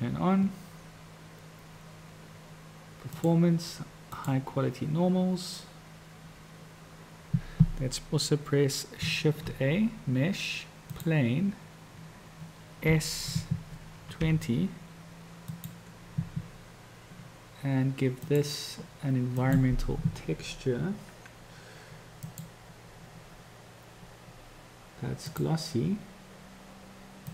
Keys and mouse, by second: 3.1 click, 7.5 click, 9.3 shift+a, 13.0 s, 19.8 click, 22.5-25.6 drag.